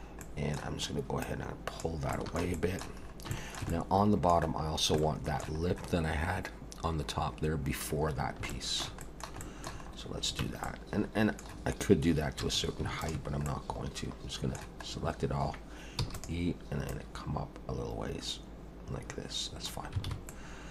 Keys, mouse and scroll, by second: 0.2 middle click, 1.2 click, 2.1 shift+middle click, 2.5 middle click, 3.0 scroll up 3, 3.4 middle click, 3.7 middle click, 4.7 scroll down 2, 5.0 shift+middle click, 5.6-6.7 scroll up 3, 8.1 scroll down 4, 8.5 shift+middle click, 9.0 middle click, 9.4 shift+middle click, 9.9 scroll up 2, 10.4 Tab, 10.6 middle click, 12.4 2, 13.0 alt+shift+click, 13.4 middle click, 14.9-15.3 scroll up 1, 16.0 e, 16.9 click, 20.1 alt+a, 20.3 middle click.